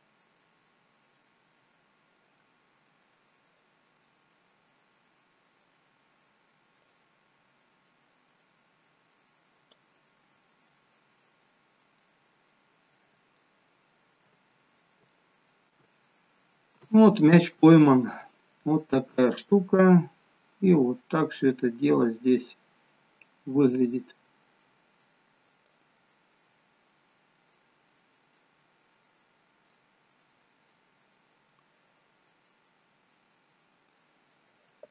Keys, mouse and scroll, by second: 0.8 middle click, 7.5 click, 11.2-11.8 scroll up 3, 11.8 scroll up 1, 11.9 middle click, 12.6-13.3 scroll down 3, 13.3 shift+middle click, 14.4-15.1 scroll up 5, 15.1 shift+middle click, 16.0 middle click, 17.5 middle click, 17.8 shift+middle click, 20.4 click, 26.4-27.2 scroll down 6, 27.4 middle click, 27.4-27.9 scroll down 1, 28.6-29.5 scroll up 1, 29.5 scroll up 5, 29.7 middle click, 32.6-33.4 scroll down 5.